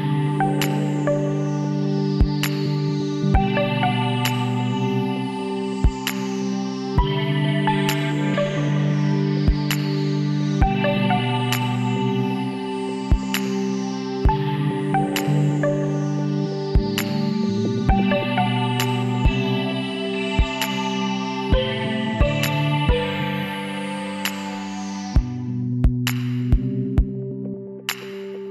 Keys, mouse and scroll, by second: 0.5 Tab, 1.7 Tab, 2.0 middle click, 2.0 a, 2.7 middle click, 3.2-4.6 middle drag, 4.3 a, 5.6-7.4 drag, 6.3 a, 7.6-12.1 middle drag, 18.0-25.7 middle drag, 25.7 shift+s.